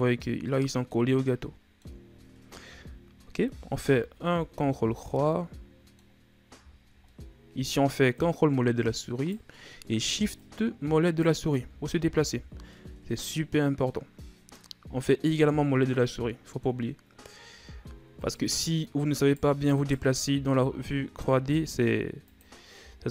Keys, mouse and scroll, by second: 2.6 KP_3, 3.7 ctrl+KP_3, 4.8-5.3 shift+scroll up 4, 5.3-6.6 middle drag, 6.6-7.1 ctrl+scroll up 4, 7.1-8.1 middle drag, 8.1 right click, 10.4 right click, 11.5 Tab, 12.1 scroll down 1, 12.3 a, 12.7-15.4 middle drag, 15.4 scroll up 1, 15.9-17.5 middle drag, 17.5 Tab, 18.2 right click, 19.1 shift+right click, 19.7 shift+right click, 20.6 e, 22.8 s.